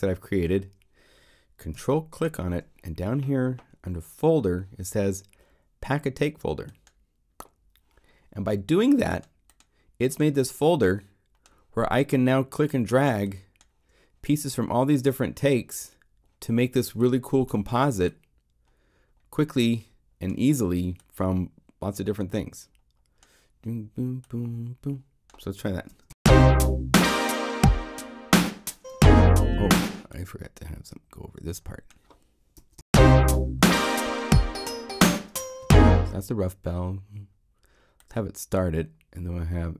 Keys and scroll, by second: 25.9 0, 26.1 Home, 32.5 0, 32.8 Home.